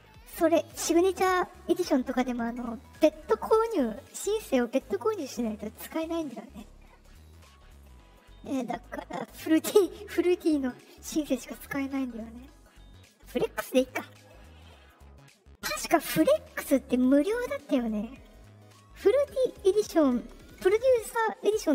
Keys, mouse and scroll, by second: 9.3 click, 13.0 click.